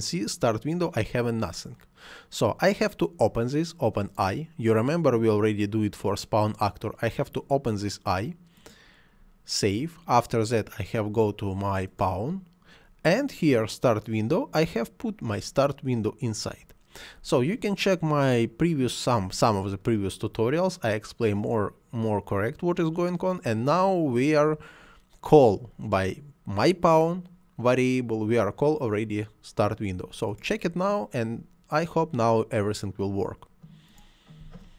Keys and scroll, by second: 34.4 space.